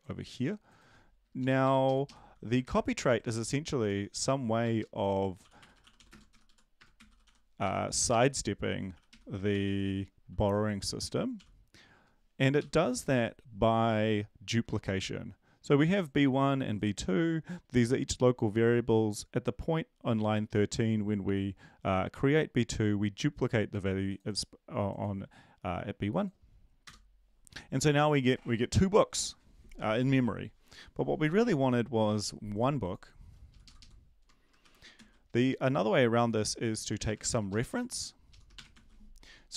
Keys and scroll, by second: 1.4 Down, 1.6 End, 1.8 Left, 2.0 Left, 2.6 ctrl+v, 3.2 ctrl+z, 3.8 ctrl+z, 4.7-8.9 typing, 7.9 Left, 9.5 ctrl+s, 11.3 ctrl+l, 12.6 Up, 26.8 Return, 33.5 Left, 34.6 typing, 34.9 ctrl+s, 36.9 BackSpace, 37.1 BackSpace, 37.3 ctrl+shift+Left, 37.5 ctrl+shift+Left, 38.3 shift+Left, 38.7 BackSpace.